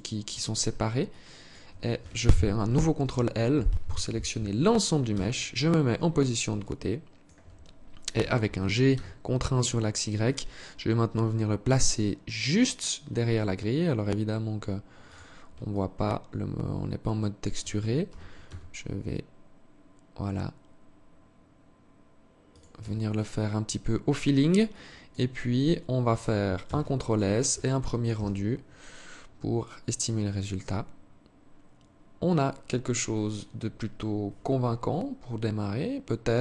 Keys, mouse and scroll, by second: 0.5 alt+click, 2.2 ctrl+l, 4.5 KP_3, 6.0 alt+shift+click, 7.6 g, 15.1 alt+click, 17.5 g, 22.2 Tab, 22.7 scroll down 4, 23.1 scroll up 1, 23.4-23.8 scroll down 1, 24.1 alt+click, 24.8 alt+click, 26.0 ctrl+s.